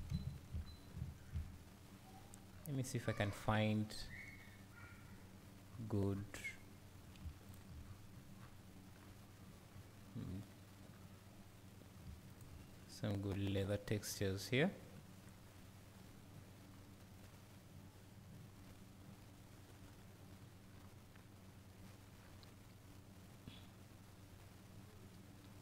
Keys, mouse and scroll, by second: 0.1 `, 0.6-0.9 scroll down 2, 0.9 `.